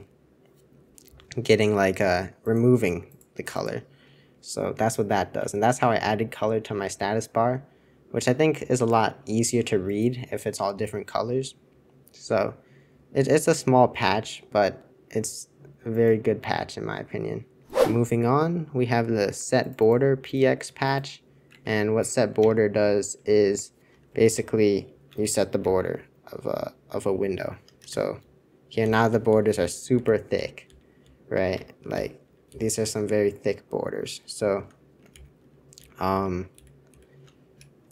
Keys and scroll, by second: 5.5 super+1, 6.8 super+2, 21.6 super+1, 22.3 super+Return, 25.6 super+}, 26.2 super+}, 26.3-27.8 super+}, 27.8 super+Return, 28.8 super+j, 29.0 super+j, 29.3 super+j, 29.5 super+j, 30.3 shift+super+j, 30.6 shift+super+j, 31.0 shift+super+j, 31.5 super+Return, 31.9 shift+super+j, 32.2 shift+super+j, 32.4 shift+super+k, 34.3 alt+super+4, 35.1 super+j, 35.4 super+j, 35.8 super+j, 36.1 super+j, 36.5 super+k, 36.8 super+k.